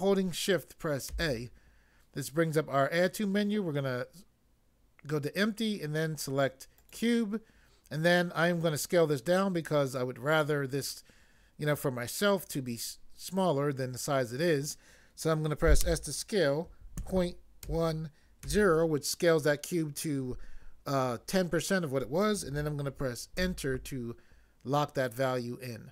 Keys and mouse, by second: 1.1 a, 6.8 click, 15.8 s, 16.9 ., 17.6 1, 18.5 0, 23.4 Return.